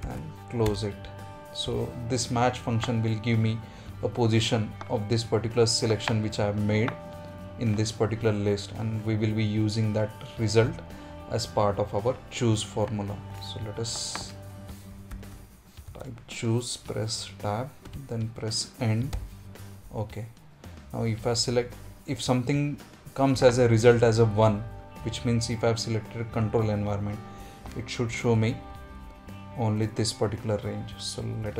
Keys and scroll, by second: 9.7 F2, 30.9 F4.